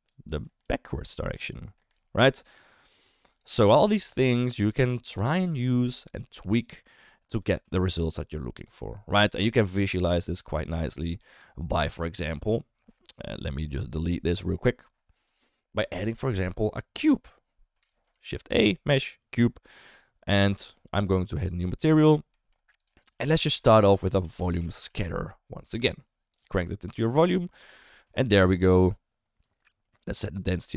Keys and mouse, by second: 0.0-3.4 typing, 0.2 click, 1.0 click, 1.6 click, 2.5 click, 2.7 click, 3.1 click, 3.4 click, 13.2 d, 13.3-15.2 right drag, 17.8 Delete, 18.1 shift+a, 21.3 click, 22.3 middle click, 22.7 click, 22.9 click, 23.1 ctrl+x, 23.5 shift+a, 26.4 click, 27.6 click, 29.4-30.7 drag.